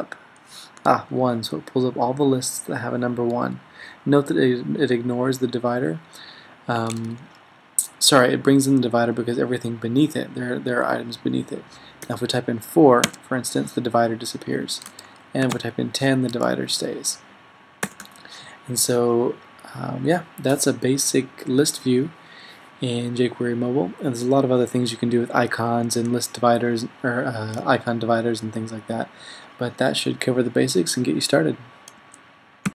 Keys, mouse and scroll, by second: 0.0 typing, 12.1 BackSpace, 13.1 typing, 15.0-18.1 typing.